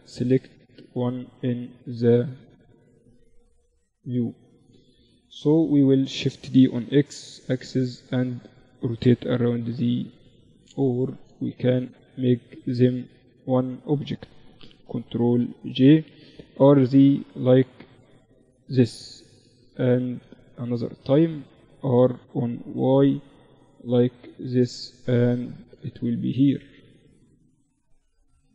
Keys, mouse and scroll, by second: 0.9 right click, 2.0 KP_Divide, 2.5-5.2 drag, 3.5-5.2 right drag, 4.3 KP_7, 5.6 shift+d, 8.0 r, 9.6-11.0 middle drag, 11.0-13.0 drag, 11.0-14.2 right drag, 14.2 ctrl+j, 15.4 r, 18.3 KP_1, 19.0 z, 20.6 r, 23.5-25.2 drag, 24.6 z, 25.2-26.6 middle drag.